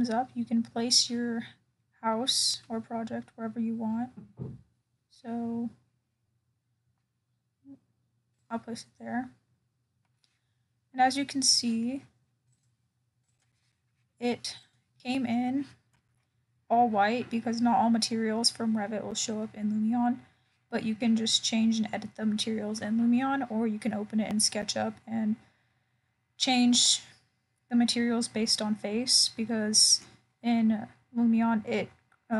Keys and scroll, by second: 19.7 ctrl+alt+o, 27.4 ctrl+alt+o.